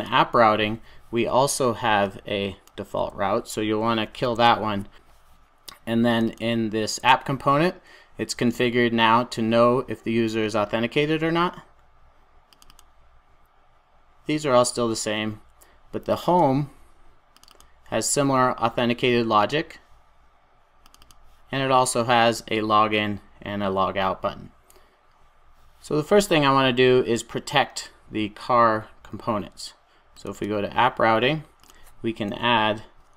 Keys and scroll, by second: 4.2 super+s.